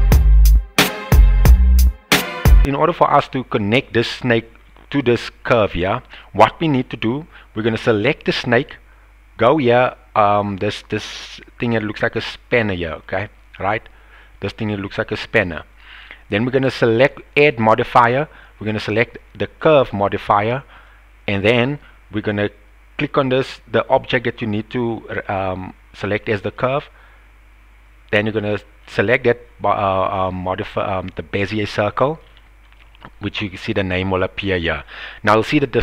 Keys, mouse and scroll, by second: 0.1 click, 0.4 g, 1.0 click, 1.8 g, 2.2 click, 2.5 g, 2.6 Tab, 2.8-3.2 middle drag, 4.9 click, 5.9 middle click, 6.7 middle click, 9.7 click, 13.0 click, 17.1-19.7 drag, 32.2-32.6 shift+middle drag, 35.4-35.8 middle drag.